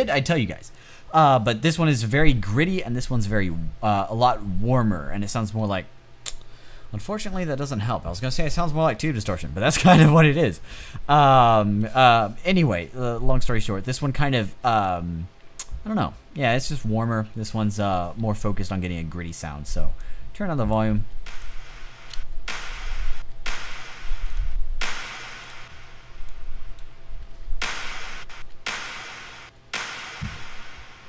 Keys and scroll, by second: 20.5-21.5 typing, 22.7 space, 24.1 space, 26.9-27.9 typing.